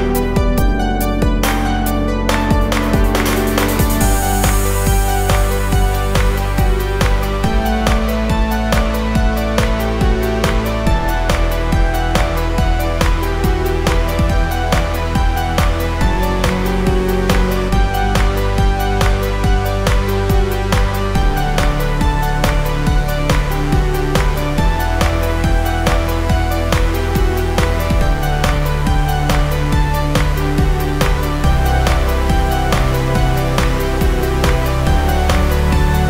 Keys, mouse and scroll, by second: 7.5-13.5 drag, 14.6 click, 17.3 click, 21.9 space, 22.0 click, 22.4 space, 23.7 click, 25.4-32.4 alt+shift+drag, 33.9 space, 34.0 click, 34.4 space.